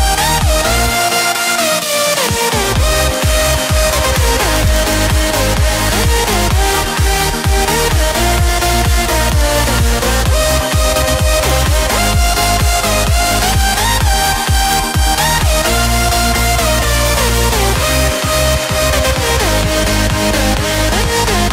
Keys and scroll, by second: 7.4 ctrl+z.